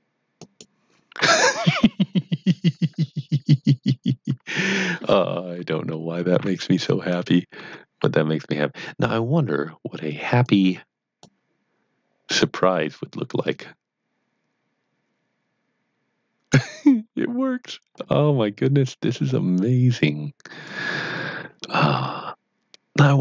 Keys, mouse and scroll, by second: 0.3 z, 0.4 click, 5.3 click, 5.4 middle click, 7.6 Tab, 10.4-22.8 click.